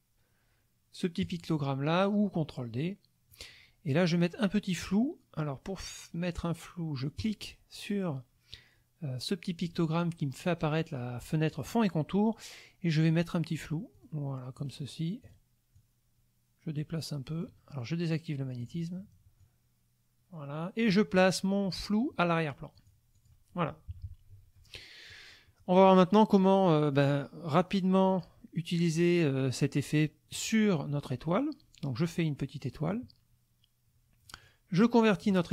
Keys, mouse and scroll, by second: 1.2 click, 3.3 click, 7.2 click, 13.1 click, 14.0 click, 15.2 click, 15.8-17.6 drag, 18.6 click, 19.4-21.0 drag, 22.7 click, 23.1 click, 23.9 KP_Subtract, 24.8 middle click, 25.5 middle click, 28.1 click, 30.3-33.1 drag, 34.3 click.